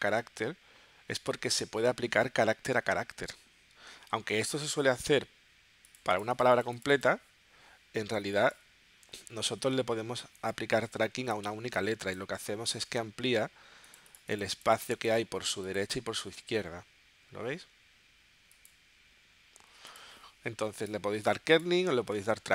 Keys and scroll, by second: 9.1 0.